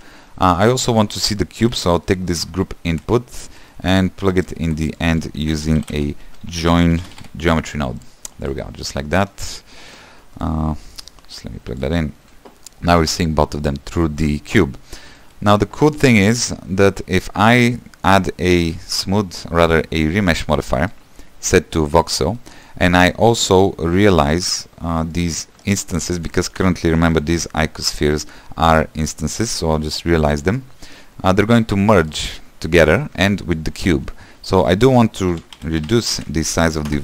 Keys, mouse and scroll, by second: 8.3 shift+a, 10.2 click, 12.0-13.1 drag, 13.1-18.8 middle drag, 21.1-22.6 drag, 22.6 middle click, 23.0-24.5 scroll up 1, 24.5-30.2 drag, 31.7-32.1 scroll up 2, 32.1 middle click, 32.5-36.9 scroll down 1, 36.9 scroll down 1.